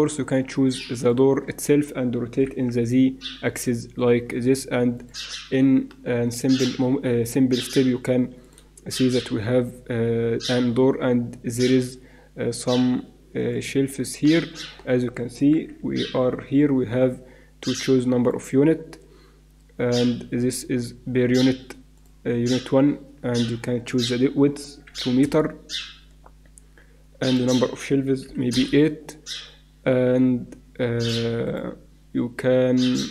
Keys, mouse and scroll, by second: 0.9 right click, 2.3 r, 8.4 click, 8.9 shift+a, 9.9 click, 15.5 t, 21.2 middle click, 21.9-25.8 drag, 27.2-29.2 drag, 31.0-33.1 drag.